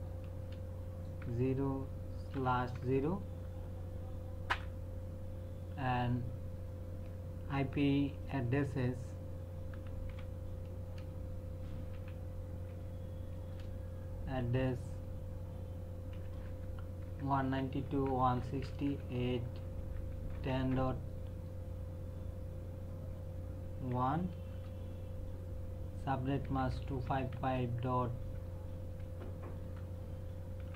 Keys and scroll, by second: 0.4 space, 1.2 KP_0, 2.3 /, 2.7 KP_0, 4.5 Return, 9.5-10.9 typing, 11.9-13.5 typing, 17.0-20.6 typing, 23.9 KP_1, 24.5 space, 26.4 KP_2, 26.7 KP_5, 27.5 KP_3, 29.0 BackSpace, 30.6-30.7 typing.